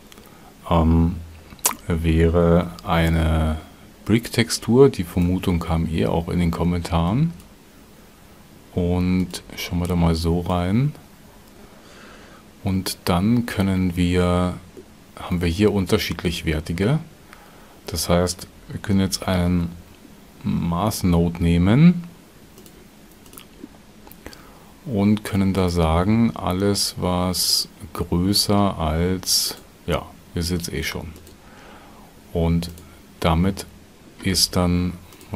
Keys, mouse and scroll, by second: 2.4 shift+x, 2.6 shift+a, 9.2 ctrl+shift+click, 18.8 shift+a.